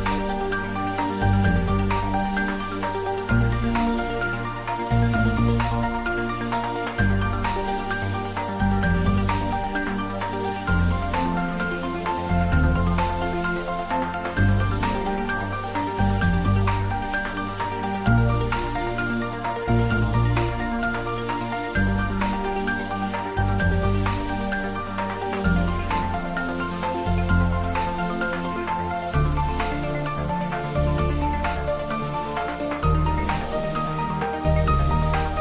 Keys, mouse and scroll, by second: 2.5-2.8 scroll down 1, 3.9 scroll up 1, 4.4 middle click, 4.9 scroll up 1, 5.5 middle click, 6.0 scroll up 1, 6.9 middle click, 7.8 click, 9.5 3, 10.4 Return, 12.4 scroll down 1, 14.5-16.3 scroll down 1, 16.8 Tab, 18.7 Tab, 20.7 click, 22.1-22.5 scroll down 1, 22.6-23.2 middle drag, 24.6 scroll up 1, 27.5-28.9 scroll down 1, 28.9-29.7 scroll up 1, 32.4-32.8 scroll down 1, 32.8-33.7 middle click, 34.1 scroll up 1, 35.1 click.